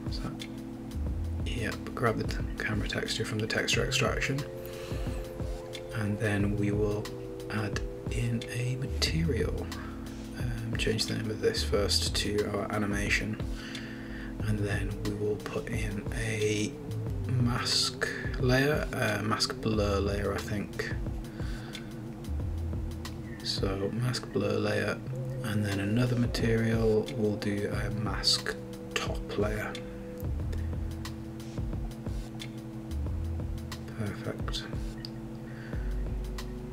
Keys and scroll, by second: 13.2 Return, 14.3-16.5 typing, 19.3-24.4 typing, 26.0-27.8 typing, 30.1 super+d, 31.1 Return, 31.5 Right, 31.9 BackSpace, 32.5 Left, 32.7 Left, 32.8 Left, 33.2 Left, 33.6 Left, 34.0-36.3 typing.